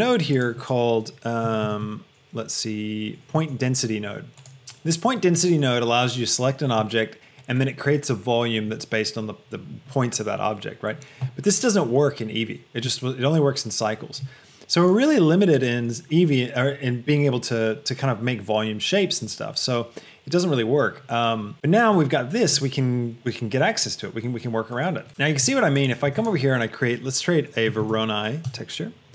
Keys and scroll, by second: 0.1 shift+a, 1.7 p, 1.9 i, 3.5 Return, 26.3 shift+a, 28.1 r, 28.7 Return.